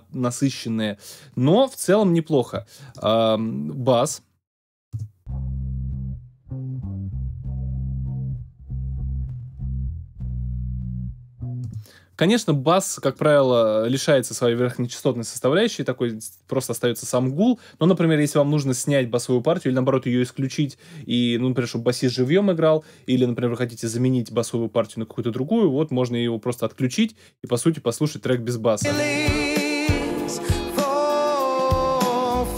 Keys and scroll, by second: 4.9 space, 11.6 space, 28.8 space.